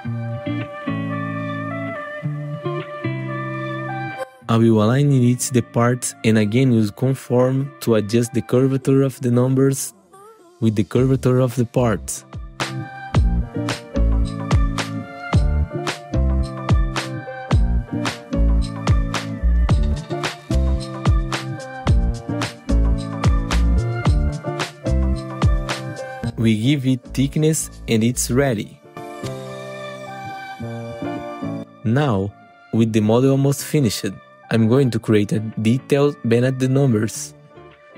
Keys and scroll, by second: 0.4 F4, 6.8 F4, 8.8 F4, 16.9 F4, 22.2 F4, 32.7 z, 33.2 F4, 34.6 F4, 35.5 F4.